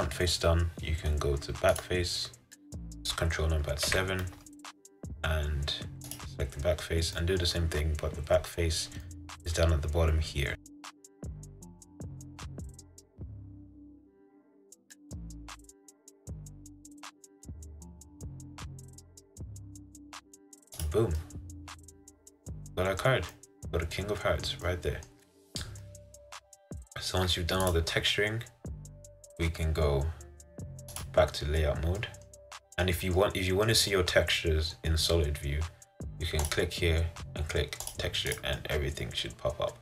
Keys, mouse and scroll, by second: 1.8 click, 4.0 ctrl+KP_7, 6.3 click, 11.2 g, 12.0 r, 13.5 s, 14.1 g, 15.8 s, 17.2 g, 18.1 s, 19.3 s, 20.9 click, 21.3-31.1 middle drag, 31.1-32.1 drag, 32.1-36.6 middle drag, 36.6-38.7 drag, 38.7-39.8 middle drag.